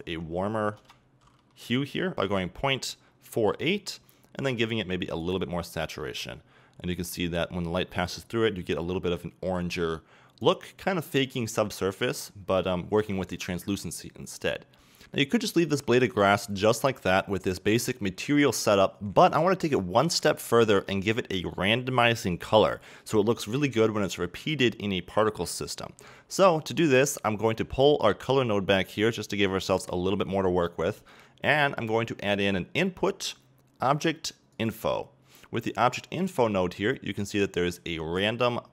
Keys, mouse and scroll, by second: 2.2-5.9 drag, 2.3 KP_Enter, 5.9 scroll down 2, 6.0-9.6 middle drag, 9.6-12.3 drag, 12.3 middle click, 13.3-15.0 drag, 15.0-27.1 middle drag, 27.1-38.7 drag.